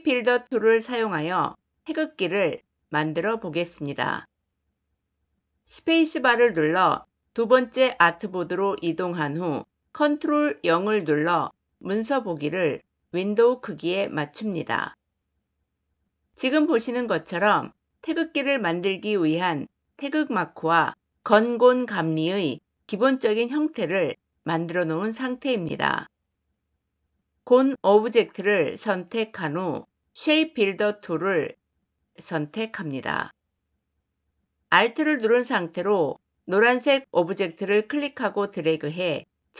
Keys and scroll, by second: 5.8 space, 9.7 ctrl+o, 9.9 ctrl+0, 27.6 shift+m.